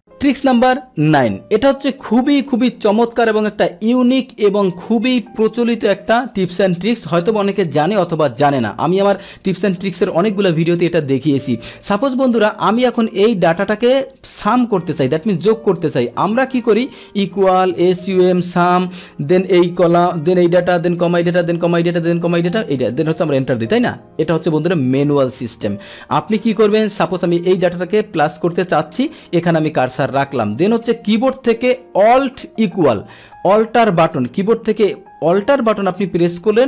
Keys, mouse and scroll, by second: 11.9 click, 12.8 click, 14.1 click, 14.5-15.2 drag, 15.7 click, 16.5 click, 18.5 Tab, 18.8 Tab, 19.4 click, 20.7 click, 21.1 click, 21.7 click, 22.0 click, 22.5 click, 23.2 Return, 23.2 click, 25.0 ctrl+z, 25.3 ctrl+z, 26.6 Delete, 27.0 click, 29.4 click, 30.2 click, 35.7 Return.